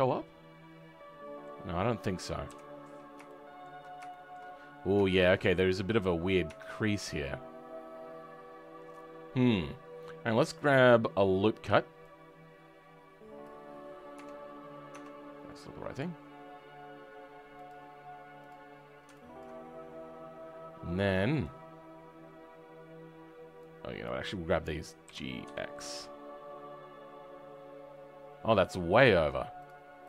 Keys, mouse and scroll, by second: 1.6-2.4 scroll down 2, 2.4 KP_7, 3.2-4.4 right drag, 3.2 shift+middle click, 4.0 shift+middle click, 4.4-4.9 scroll up 3, 4.9 right click, 4.9 shift+middle click, 5.3-6.4 scroll up 2, 6.4 Tab, 6.8-10.6 scroll down 5, 10.6-14.1 drag, 14.1 Tab, 14.8 Tab, 15.8-19.3 drag, 25.0 g.